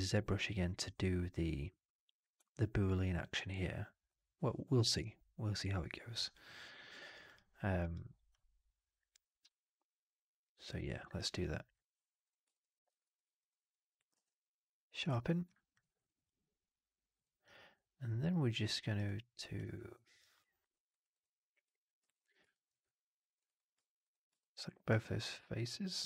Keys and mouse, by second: 12.1 drag, 12.4 alt+click, 12.6 alt+middle drag, 12.7 alt+right drag, 12.9 alt+drag, 14.0 q, 15.7 right drag, 15.9-17.0 drag, 17.3 alt+right drag, 17.6-18.5 alt+drag, 18.7 alt+right drag, 18.9 alt+click, 19.6 alt+middle drag, 20.1 alt+right click, 20.5 alt+click, 20.8 alt+right drag, 21.0 alt+click, 21.9 3, 22.1 click, 22.4 alt+middle click, 22.6 alt+right click, 22.7 alt+click, 23.3 alt+right click, 24.3 alt+click, 24.9-25.9 alt+middle drag.